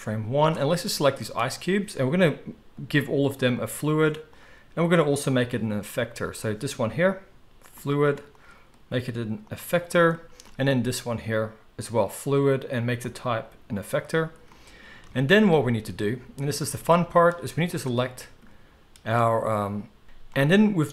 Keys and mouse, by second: 1.4-3.6 middle drag, 3.6-6.3 drag, 6.3-7.6 middle drag, 7.6-10.8 drag, 10.8-11.9 middle drag, 11.9-17.8 drag, 17.8-20.0 middle drag, 20.0 alt+a, 20.0 click, 20.4-20.9 middle drag.